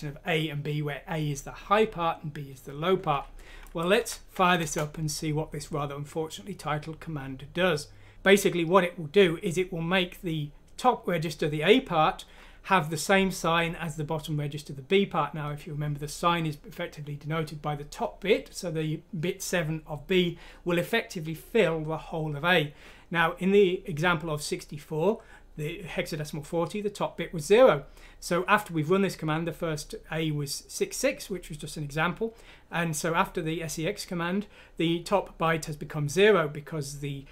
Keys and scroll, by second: 3.9 F6, 4.5 Return.